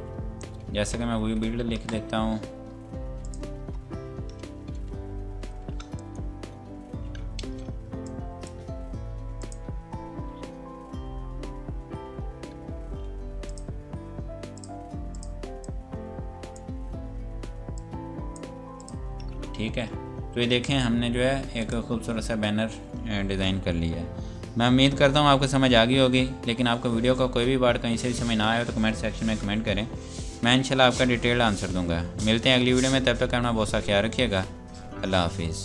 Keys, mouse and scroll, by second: 0.0 F8, 1.1 Home, 1.8 BackSpace, 3.2 click, 3.6 BackSpace, 5.4 shift+End, 7.4 space, 8.1 click, 15.8 click, 17.8 shift+click, 18.8 click, 21.6 click.